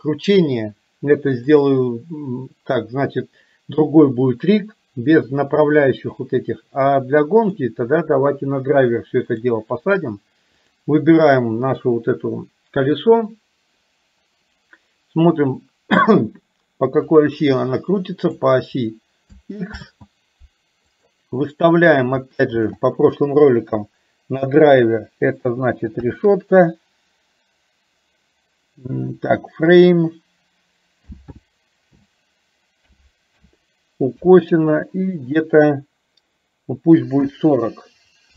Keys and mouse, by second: 1.6 click, 7.6-9.6 drag, 17.1-18.4 drag, 19.9 ctrl+z, 21.0-38.3 drag.